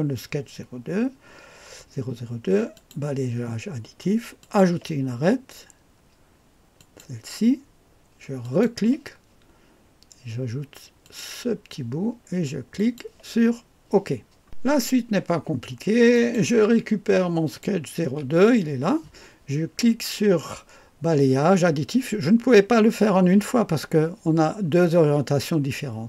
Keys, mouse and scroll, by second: 2.7-13.0 drag, 14.4-16.4 drag, 17.5 click.